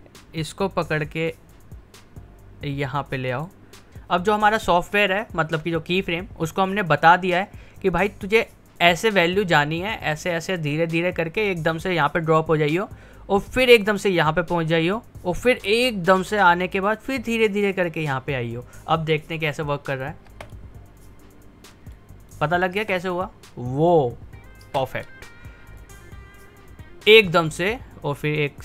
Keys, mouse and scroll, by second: 1.4 typing, 1.5-4.3 drag, 8.8 click, 19.5 click, 20.3 space, 21.9 click, 22.2-22.7 typing, 24.5 typing, 25.8-28.6 drag.